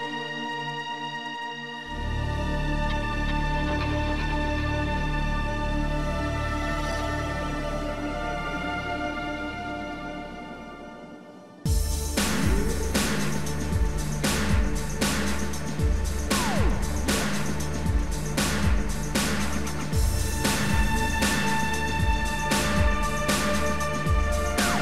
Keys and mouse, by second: 3.0 click, 4.6 click, 7.0 click, 7.7 shift+click, 19.2 shift+click, 22.6 shift+click, 23.1 shift+click.